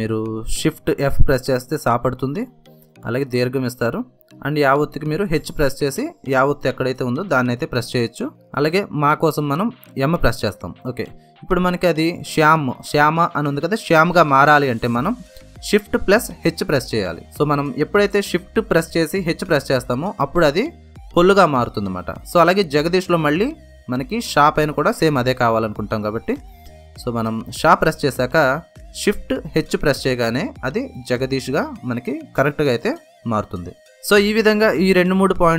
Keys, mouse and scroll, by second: 0.0 BackSpace, 2.0 shift+f, 4.3 e, 8.2 h, 12.0 b, 17.3 b, 17.6 shift+h, 19.7 space, 20.9-24.2 typing, 27.3 shift+', 28.1 shift+h, 31.8-35.5 drag.